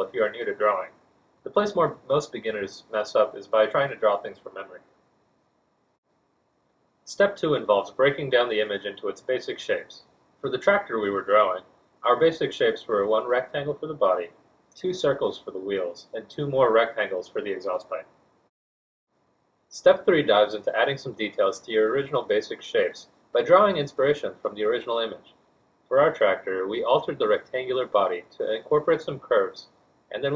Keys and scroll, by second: 3.5 a, 20.4 z, 21.5 F1, 24.7 Return, 25.9 z, 30.0-30.3 typing.